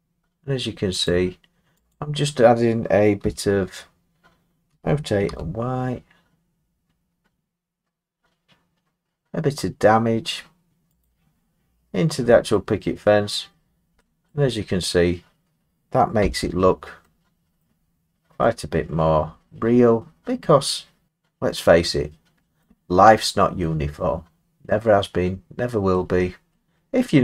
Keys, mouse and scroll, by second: 1.1 click, 1.9 click, 3.2 l, 4.7 r, 5.3 y, 11.0 click, 11.6-12.2 scroll, 12.5-13.6 scroll, 13.6 middle click, 13.9 middle click, 14.0 middle click, 14.3 middle click, 14.6 middle click, 16.2 Tab, 16.2 middle click, 17.1 middle click, 17.2 middle click, 17.6 scroll, 17.8 middle click, 18.4 middle click, 18.5 middle click, 19.2 middle click, 19.4 middle click, 20.4 middle click, 21.8 scroll down 2, 22.5 middle click, 22.6 middle click, 23.1 middle click, 23.2 middle click, 24.1-24.9 scroll, 25.9-26.3 scroll, 26.9-27.2 scroll.